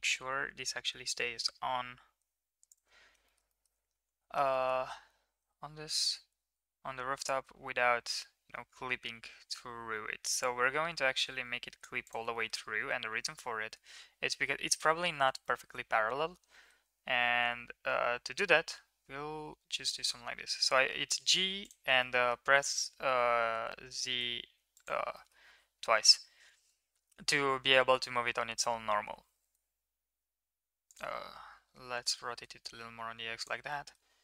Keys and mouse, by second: 3.9 ctrl+s, 4.5 middle click, 6.3 r, 12.5 middle click, 13.2 KP_1, 14.4 KP_3, 15.4 shift+middle click, 16.3 g, 22.2 middle click, 25.3 middle click, 26.0 KP_1, 26.9 KP_3, 29.0 r, 31.6 g, 33.9 middle click.